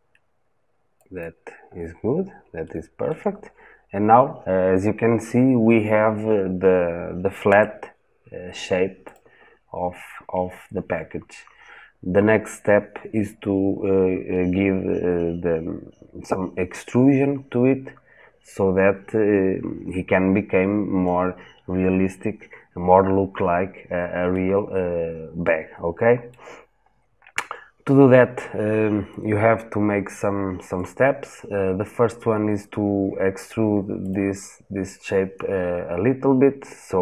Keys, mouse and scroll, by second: 1.5 scroll down 1, 2.4 shift+middle click, 3.2-5.1 scroll up 1, 7.2 Tab, 8.9 click, 24.1-27.4 middle drag, 27.4-31.8 scroll up 1, 33.9 click.